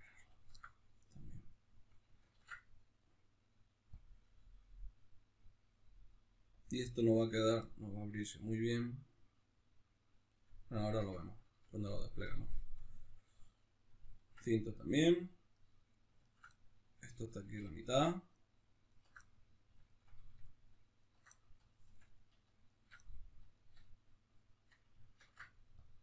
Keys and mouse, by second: 2.3 ctrl+e, 2.3-15.5 middle drag, 15.5-16.5 right drag, 16.5-17.6 middle drag, 17.6-19.2 alt+shift+right drag, 19.2-20.4 middle drag, 20.4 alt+shift+right click, 21.3-22.7 middle drag, 22.7 alt+shift+right click, 23.1-26.0 middle drag, 25.2 ctrl+e.